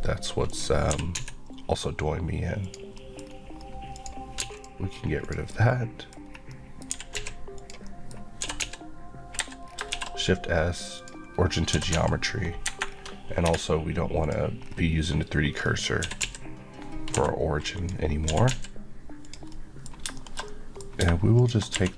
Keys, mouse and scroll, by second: 0.5 click, 0.9 typing, 2.6 click, 3.0 middle click, 3.3 scroll up 1, 3.9 click, 4.4 x, 4.6 click, 4.9 scroll up 1, 5.3 click, 5.5 middle click, 6.2 scroll up 1, 6.5 middle click, 6.9 typing, 7.6 click, 7.9 middle click, 8.5 typing, 9.4 Escape, 9.7 scroll down 2, 9.9 shift+s, 11.0 click, 11.4 scroll up 1, 11.9 typing, 12.7 Escape, 12.9-13.5 scroll down 1, 14.2 click, 14.6-15.6 scroll down 1, 15.6 scroll up 1, 16.0-17.1 typing, 18.3 click, 18.3 typing, 19.3 click, 19.5 middle click, 21.4 click, 21.8 q.